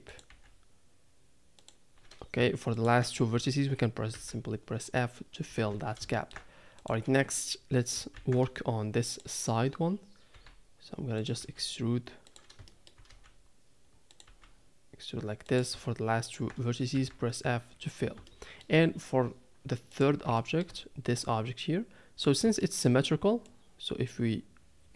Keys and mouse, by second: 0.3 e, 2.8 shift+click, 4.1 f, 5.5 a, 5.7 a, 6.1 shift+middle click, 6.8 click, 8.3 shift+d, 10.7 e, 11.4 e, 12.7 shift+middle click, 13.1 e, 14.3 e, 16.2 shift+click, 16.9 f, 18.3 shift+middle click, 20.4 shift+middle click, 22.6 shift+middle click, 23.7-24.9 drag.